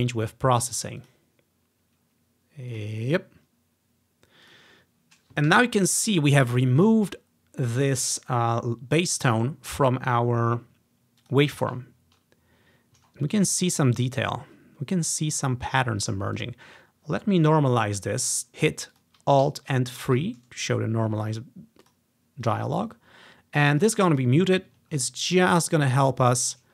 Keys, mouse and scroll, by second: 1.1 click, 2.8 click, 4.5 click, 5.6 g, 5.6-9.5 drag, 11.3 click, 13.1-13.8 scroll up 2, 13.8-14.3 scroll down 2, 16.1 click, 16.4 click, 18.5 alt+4, 18.5 ctrl+z, 19.0 click, 19.5 alt+3, 21.9-25.7 drag, 25.0-25.7 ctrl+scroll up 1.